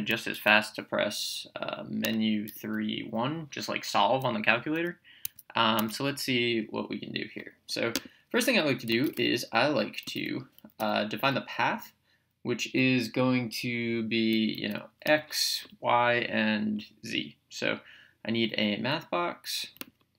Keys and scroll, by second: 2.0 Menu, 2.5 3, 5.2 Escape, 9.4-10.7 typing, 15.0 Return, 19.9 Menu.